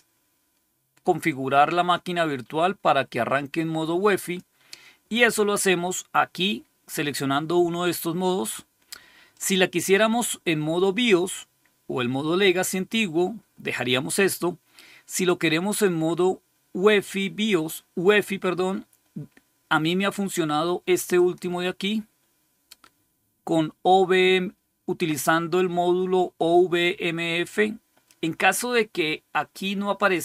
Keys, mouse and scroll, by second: 4.1 click, 9.2 click, 14.0 click, 21.0 click, 29.8 click.